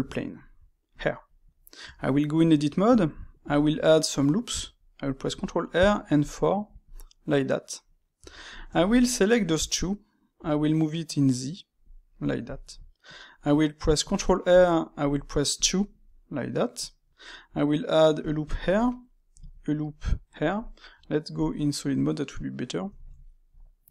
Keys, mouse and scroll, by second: 1.3-1.8 middle drag, 1.8 Tab, 2.2-5.2 middle drag, 5.2 ctrl+r, 7.9 middle click, 8.1 Tab, 8.4 click, 8.8 shift+click, 9.0-10.3 middle drag, 10.3 g, 12.1-13.9 middle drag, 13.9 ctrl+r, 16.0-18.1 middle drag, 18.1 ctrl+r, 18.8 middle click, 19.3 ctrl+r, 21.3 click, 21.8-23.9 middle drag.